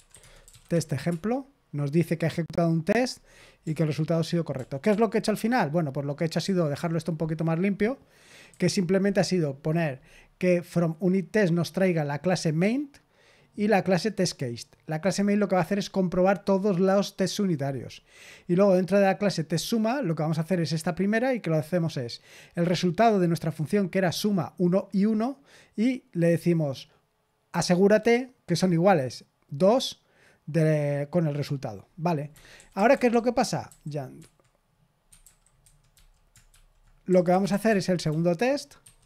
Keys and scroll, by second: 0.0-0.9 typing, 1.0 Return, 4.5 ctrl+p, 4.8 ctrl+p, 5.3 Return, 6.3-6.7 typing, 8.4 typing, 32.2 Escape, 32.5-33.6 typing, 34.9-38.0 typing.